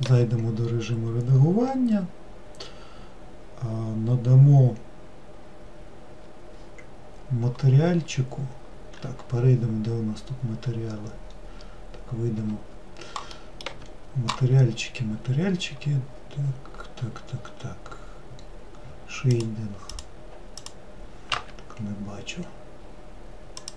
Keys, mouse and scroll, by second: 0.0 middle click, 0.2 Tab, 10.3-11.7 scroll down 2, 11.7 scroll up 2, 12.5 Tab, 13.5 middle click, 13.8 Tab, 15.4-17.1 scroll up 1, 17.1 scroll down 1, 18.5-19.5 scroll down 5, 19.5-23.7 drag.